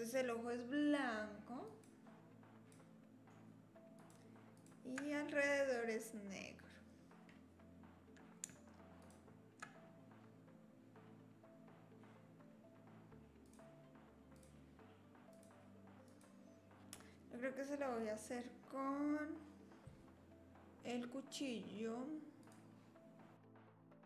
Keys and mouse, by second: 1.7-2.8 drag, 4.0 shift+click, 4.6 shift+click, 9.0 shift+click, 14.5 click, 16.1 click, 16.8 middle click, 23.3 click.